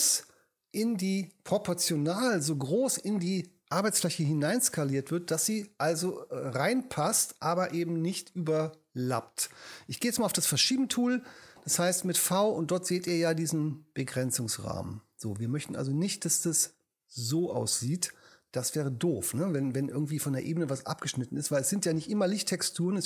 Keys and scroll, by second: 4.1 super+d, 10.3 v.